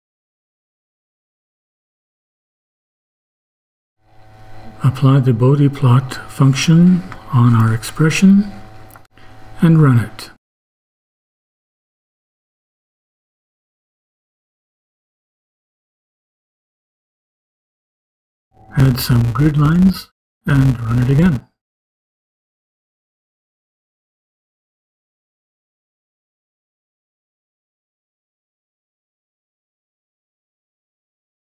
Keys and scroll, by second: 0.8 Right, 2.2 ;, 2.9 Return, 5.0-12.0 typing, 12.2 shift+Return, 17.2 ,, 17.9 Return, 21.2-24.6 typing, 25.8 -, 26.3 shift+-, 26.6 shift+., 27.9-31.0 typing.